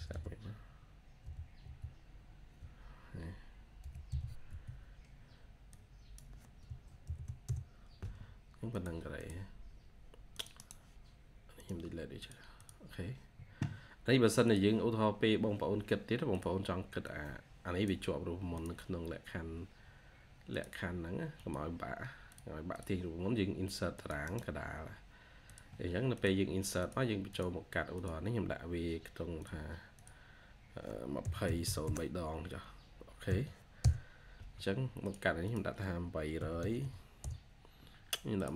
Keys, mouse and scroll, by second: 1.1-1.5 typing, 3.7-4.6 typing, 4.3 Tab, 6.9 typing, 7.3 Return, 9.0 double click, 10.4 right click, 12.4 double click, 21.4 typing, 22.6 double click, 24.1 right click, 30.8-33.1 typing, 33.7 Return, 35.3 double click, 36.0-37.2 typing.